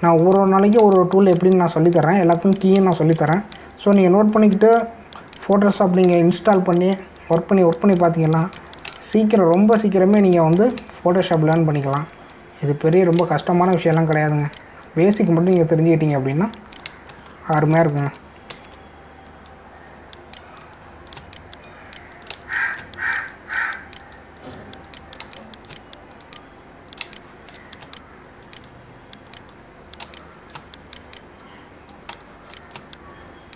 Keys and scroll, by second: 0.0 space, 1.8 space, 3.8 space, 7.1 space, 11.9 space, 14.2 space, 18.7 ctrl+alt+z, 21.6 space, 23.3 space, 28.0 space, 31.0 space, 33.1 space.